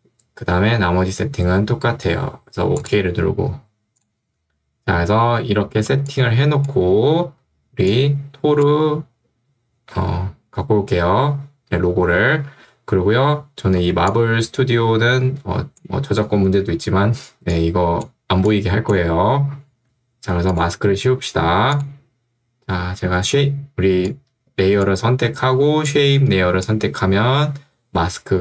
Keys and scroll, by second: 6.0 ctrl+2, 7.2 Escape, 13.8 ctrl+2, 19.8 Escape, 23.3 ctrl+2.